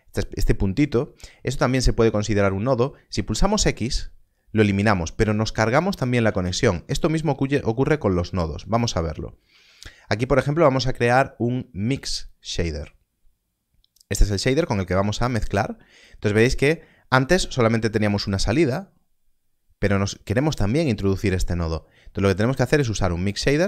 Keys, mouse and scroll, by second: 3.7 x, 6.4 ctrl+z, 8.5 ctrl+x, 9.4 shift+a, 12.2 click, 15.3 click, 20.0 click.